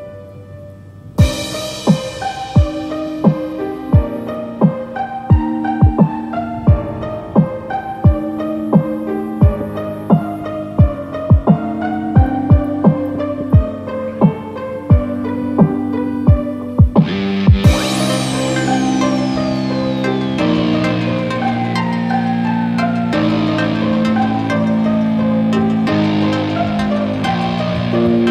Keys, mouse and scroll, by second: 0.6 click, 1.4 KP_0, 3.6 KP_Enter, 5.7 middle click, 6.5-7.7 scroll up 11, 7.7 click, 8.7-9.0 scroll down 2, 9.4 click, 10.6 KP_0, 12.6 click, 13.3-14.2 scroll down 3, 14.2-14.7 scroll down 1, 14.7 click, 16.5 click, 19.6-20.0 scroll up 1, 20.7 click, 22.9 click, 25.5 middle click, 26.0 scroll up 3, 26.3 middle click, 27.3 click.